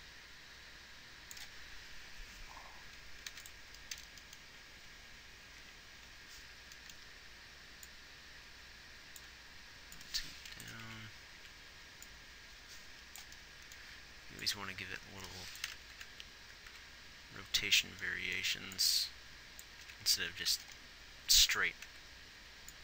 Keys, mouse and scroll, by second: 3.6 ctrl+s, 6.0 Right, 11.2 Left, 11.8 Right, 16.3 Left, 17.1 Right, 20.2 Left, 20.9 Right, 21.7 Left, 22.3 Right.